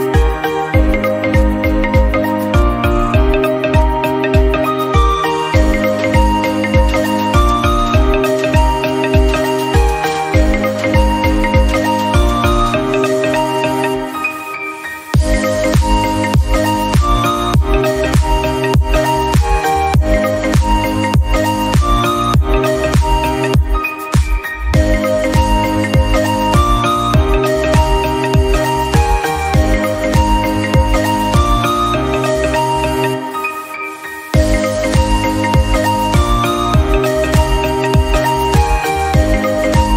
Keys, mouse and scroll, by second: 2.3 ctrl+z, 2.6 middle click, 2.8 shift+click, 3.0 middle click, 3.1 scroll up 1, 3.3 middle click, 3.6 ctrl+b, 5.9 Tab, 6.8 ctrl+z, 7.0 ctrl+z, 7.3 ctrl+b, 8.5 Tab, 8.6-9.3 right drag, 9.3 /, 9.4 scroll down 1, 9.6 scroll up 3, 9.8 scroll down 1, 9.9-10.3 drag, 10.3 s, 10.9 click, 11.2-11.5 scroll up 3, 11.5 KP_Decimal, 11.8 middle click, 12.0 scroll up 1, 12.2 scroll down 2, 12.4-13.4 middle drag, 13.4 s, 14.2-14.8 scroll down 1, 14.8 KP_7, 15.2 scroll down 1, 15.3 shift+middle click, 15.6-15.9 scroll up 1, 15.9 s, 16.3 g, 16.7-17.1 middle drag, 17.1 click, 17.7 KP_Decimal, 17.9-18.2 scroll down 5, 18.2 middle click, 18.5-18.9 scroll up 1, 18.9 r, 20.5-20.9 middle drag, 20.9 g, 21.3-22.1 middle drag, 22.3-23.3 scroll down 6, 23.3 KP_7, 23.9 shift+d, 24.9 shift+d, 25.3 middle click, 25.4-25.7 scroll up 2, 25.7-26.2 middle drag, 26.2 KP_Decimal, 26.4 scroll down 1, 26.5 middle drag, 26.7 scroll up 1, 26.9-28.7 middle drag, 29.2-29.9 middle drag, 29.9 r, 30.6-31.2 middle drag, 31.2 scroll down 2, 31.3-31.9 middle drag, 31.9 scroll up 2, 32.1-32.5 middle drag, 32.5 click, 32.6-33.2 middle drag, 33.2 scroll up 2, 33.3-33.8 middle drag, 33.8 scroll down 2, 34.1 r, 34.6-35.3 middle drag, 35.3 r, 35.7-36.1 middle drag, 36.1 scroll down 8, 36.3 middle click, 36.5-37.3 scroll up 2, 36.8 shift+middle drag, 37.3 click, 37.3 Tab, 37.8 click, 38.3 Tab, 38.3 scroll down 4, 38.6 middle click, 38.9-39.5 scroll up 3, 39.1 middle click, 39.3 Tab, 39.5 click.